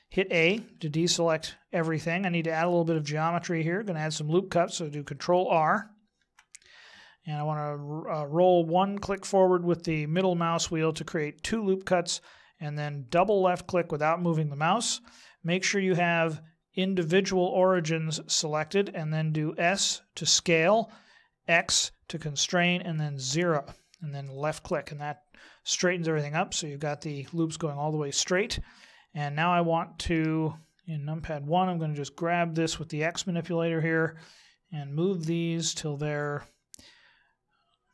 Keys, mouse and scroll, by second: 0.5 a, 6.1 ctrl+r, 15.7 click, 19.6 s, 26.1 middle click, 30.1 KP_1, 31.8 click.